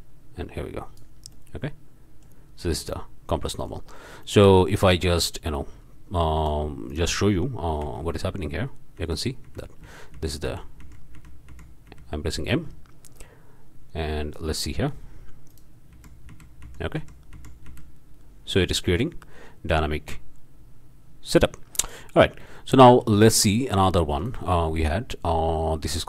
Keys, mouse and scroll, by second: 1.3-2.4 drag, 3.6-3.9 drag, 4.2-4.6 drag, 5.5-6.6 drag, 6.9 click, 7.8 m, 9.0 m, 13.1-14.9 drag, 15.5 click, 15.9 m, 18.9-22.2 drag, 24.2 click.